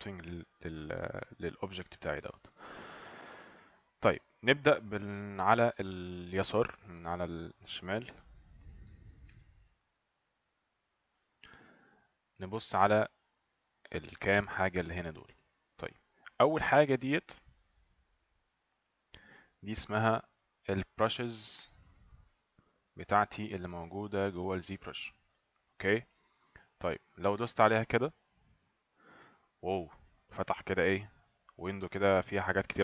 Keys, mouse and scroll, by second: 7.6 click, 10.3 click, 11.9 click, 17.8 click, 22.9 click, 25.1 click, 28.0 click.